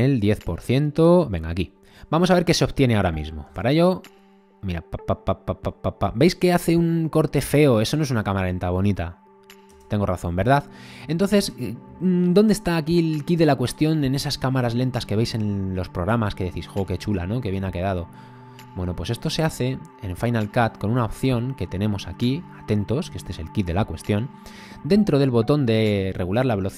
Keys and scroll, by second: 3.5 space, 9.7 space.